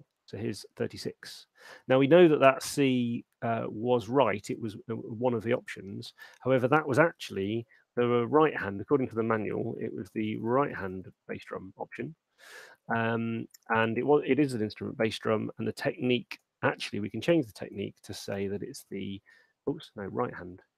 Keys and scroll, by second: 8.0 shift+h, 10.3-11.6 typing, 18.7 shift+h.